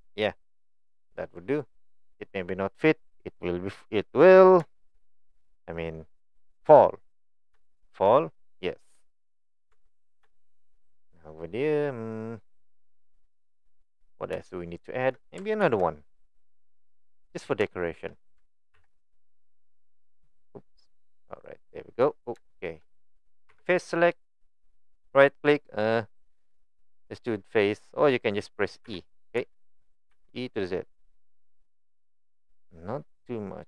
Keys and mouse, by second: 0.4-2.0 middle drag, 2.5-4.1 middle drag, 5.0-5.4 middle drag, 7.7 shift+middle click, 8.8 middle drag, 9.3-9.6 middle drag, 9.7 Tab, 12.4 middle click, 14.4 shift+middle click, 15.6 ctrl+r, 17.7 shift+middle click, 18.7 ctrl+b, 21.5 right click, 22.5 shift+middle click, 24.6-28.0 right drag.